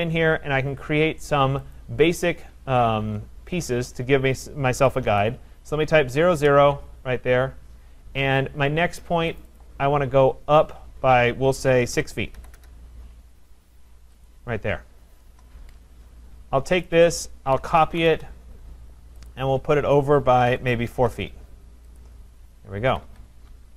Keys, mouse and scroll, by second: 0.2-0.8 scroll, 1.8 click, 4.5-5.6 typing, 6.4 Return, 9.4 click, 9.6 click, 10.2-10.5 scroll, 12.0-13.2 typing, 12.6 Return, 13.2 middle click, 13.4 middle click, 13.6 middle click, 14.3 click, 15.3 Return, 16.9 click, 17.3-18.9 typing, 19.3 click, 20.2-21.0 typing, 22.0 click, 22.3 middle click, 22.4 Return, 22.4-22.9 scroll, 22.9 Escape, 22.9 scroll, 23.1 Escape.